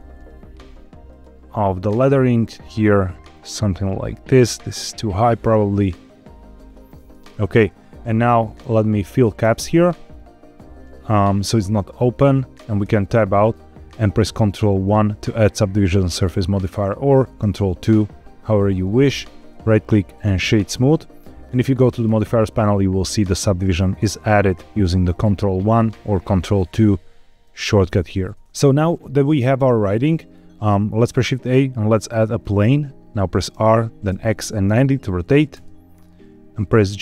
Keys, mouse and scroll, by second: 0.0 z, 1.0 click, 1.6 click, 1.9 g, 2.0 z, 3.2 click, 4.0 click, 4.2 g, 4.4 z, 6.6 click, 9.3 click, 12.8 Tab, 14.8 ctrl+1, 17.3 ctrl+2, 19.3-20.7 right drag, 21.9 click, 25.6 ctrl+1, 26.3 ctrl+2, 27.4 ctrl+2, 27.6 ctrl+1, 28.1 ctrl+2, 29.5-29.8 scroll down 2, 30.2 middle click, 30.9 shift+a, 33.4 r, 34.0 x, 34.6 KP_9, 34.7 KP_0, 35.5 KP_Enter, 36.7 middle click.